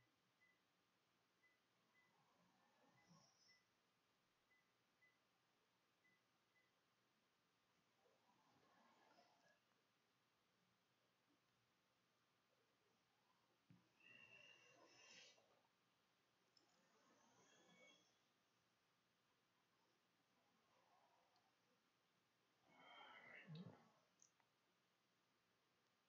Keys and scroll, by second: 0.6-5.2 typing, 6.9 ctrl+shift+z, 7.2 ctrl+shift+s, 8.5-9.7 typing.